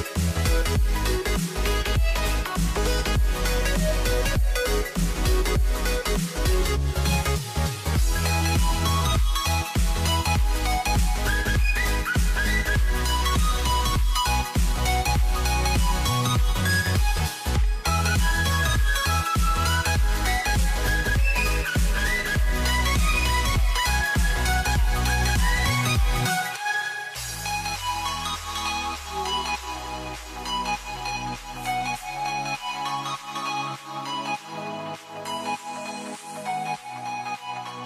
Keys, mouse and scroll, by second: 2.0 scroll up 2, 5.1 s, 6.7 s, 8.3 s, 9.9 a, 11.6 shift+click, 13.3-15.0 shift+middle drag, 15.0-16.7 scroll down 1, 16.7-18.4 scroll up 4, 18.4 click, 20.2 g, 22.0-23.8 scroll up 2, 23.8-27.5 middle drag, 27.5 z, 29.3 s, 31.1 g, 32.9-34.6 shift+middle drag, 34.6 c, 36.3 s.